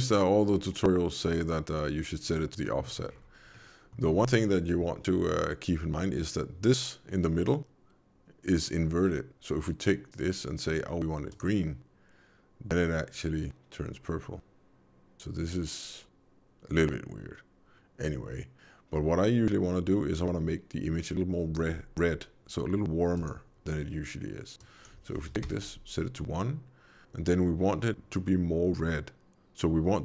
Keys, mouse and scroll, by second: 0.4-1.3 scroll down 2, 1.3-2.6 scroll down 1, 2.6 middle click, 3.1-3.6 scroll up 5, 3.5 middle click, 11.2 click, 23.1 click.